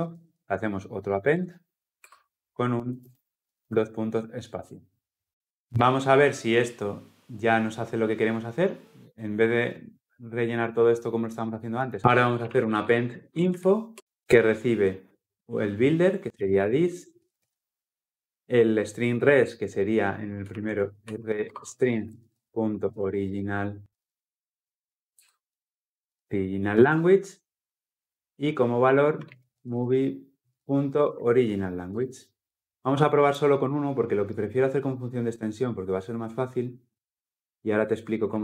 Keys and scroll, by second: 1.8 Return, 13.7 Return, 25.0 alt+Return, 26.5 alt+Return, 31.7 Return.